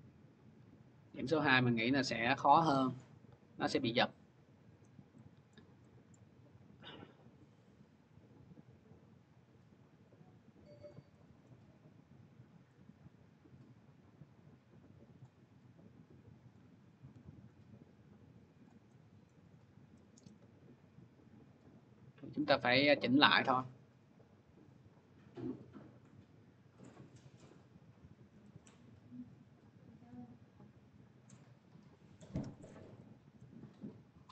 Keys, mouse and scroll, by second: 1.2 scroll, 2.2 click, 3.7 scroll, 5.4 scroll, 6.0 scroll, 10.7 click, 11.3 scroll, 14.4 middle click, 15.0 click, 16.5 click, 17.1 ctrl+z, 18.5 click, 19.1 scroll, 20.1 scroll, 22.2 click, 22.9 scroll, 23.7 middle click, 27.4 middle click, 27.4 click, 29.9 click, 31.3 click, 33.2 middle click.